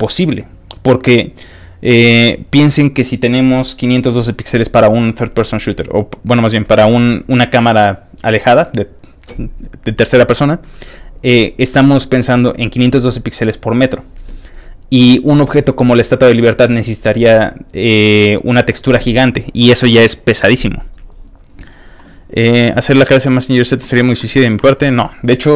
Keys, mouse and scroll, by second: 11.4-12.5 scroll up 1, 12.5-15.0 scroll up 1, 15.0-18.3 scroll up 1, 18.3-25.5 scroll up 1.